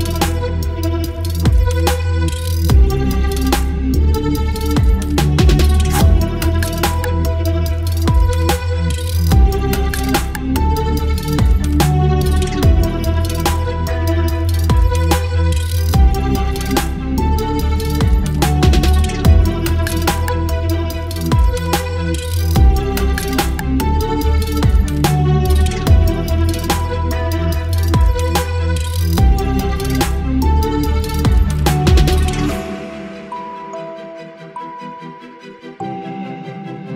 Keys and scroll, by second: 2.6 Delete, 3.9 End, 4.3 End, 4.4 Delete, 4.7 space, 6.9 Delete, 8.3 Delete, 9.6 Delete, 10.6 Delete, 13.1 Delete, 14.0 ctrl+BackSpace, 14.9 ctrl+BackSpace, 15.7 space, 18.9 space, 20.8 ctrl+BackSpace, 23.3 space, 23.5 v, 25.6 Left, 26.6 Left, 27.1 Left, 27.4 space, 29.6 v, 29.6 ctrl+t, 31.6 Return, 32.0 Down, 34.2 space.